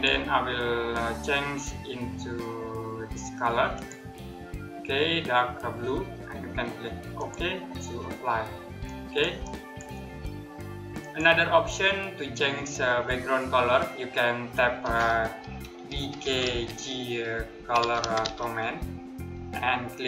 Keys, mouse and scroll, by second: 3.4 click, 6.8 click, 15.3-18.5 typing.